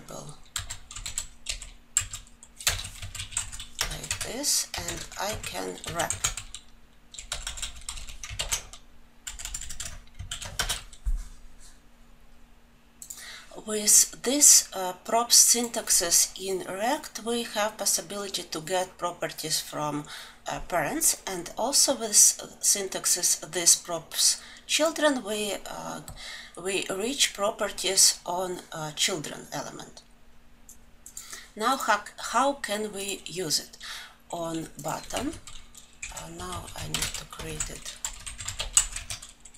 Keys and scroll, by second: 2.9 Return, 8.7 ctrl+alt+j, 39.4 Tab.